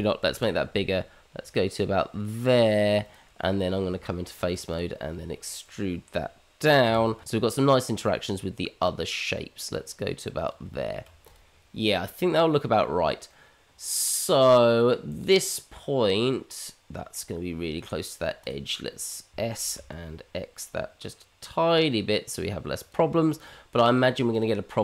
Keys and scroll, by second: 0.2 ctrl+b, 3.9 Tab, 6.8 e, 10.6 Tab, 19.3 s.